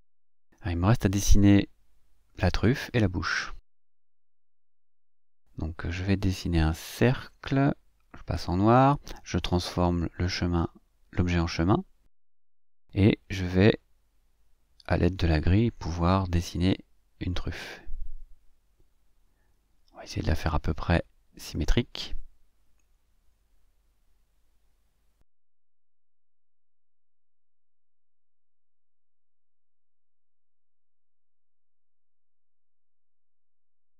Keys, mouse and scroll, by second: 0.8 click, 1.6 click, 3.8 click, 5.0-7.1 ctrl+shift+drag, 8.8 click, 10.3 click, 11.8 click, 13.1 click, 15.8-18.3 drag, 19.1-24.7 drag, 25.3-26.9 drag, 27.7-31.5 drag, 32.3 click, 33.2 click.